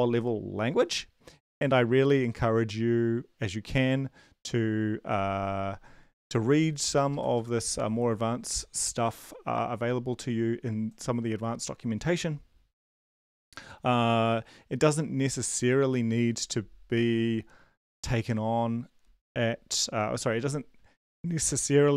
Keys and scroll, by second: 7.1 super+Left.